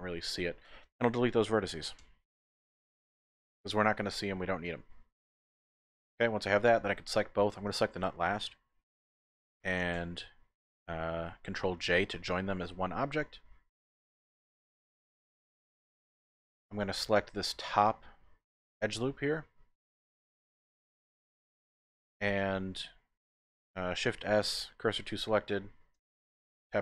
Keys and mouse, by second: 2.0 x, 3.6-5.7 drag, 5.8 Tab, 6.6 shift+click, 11.8 ctrl+j, 14.5-15.7 drag, 15.9 Tab, 16.3 Tab, 16.5 click, 16.8 Tab, 18.4 alt+click, 18.9 click, 19.8-22.9 middle drag, 19.8 typing, 24.1 shift+s, 26.0 Tab.